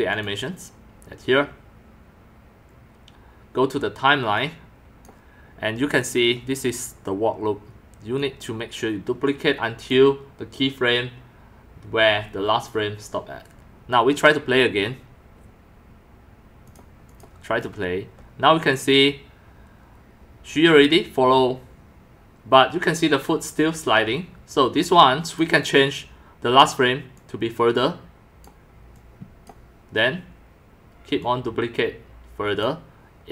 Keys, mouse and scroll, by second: 0.1 click, 4.4 click, 4.6 click, 4.8 click, 6.0 click, 8.2 click, 9.3 click, 15.7 click, 16.6 click, 17.1 click, 17.6 middle click, 24.7 click, 25.3 click, 27.1 click, 28.9-29.4 drag, 31.2-32.6 drag, 32.9 drag.